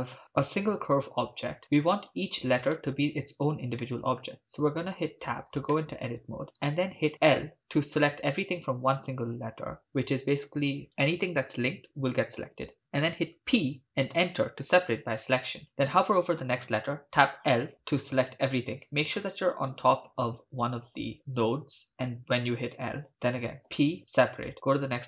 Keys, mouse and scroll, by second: 2.7 right click, 3.9 middle click, 5.1 Tab, 5.8 shift+middle click, 6.7 right click, 7.3 l, 13.4 p, 17.2 l, 17.7 right click, 17.7 l, 23.6 p.